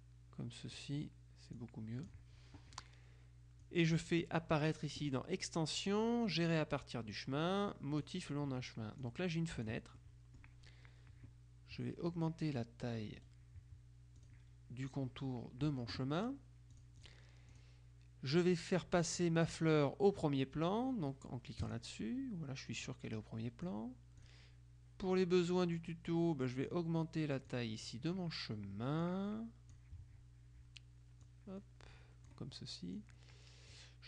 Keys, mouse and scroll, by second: 1.7 click, 3.8-8.6 drag, 9.1 click, 10.1 right click, 13.3 right click, 14.3 click, 16.8 click, 18.5 click, 21.7 click, 22.9-24.8 drag, 25.8-27.2 drag, 27.6-28.4 drag, 29.1-30.3 drag, 31.3-32.8 drag, 33.0-34.0 drag.